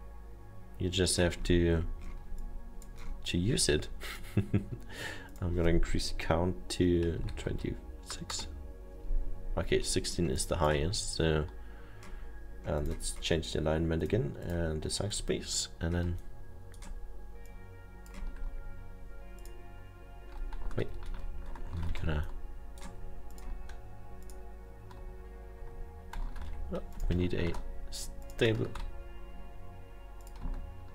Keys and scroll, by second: 7.2 2, 7.6 6, 10.5 Return, 21.9 ctrl+z, 22.0 ctrl+z, 27.0 ctrl+z.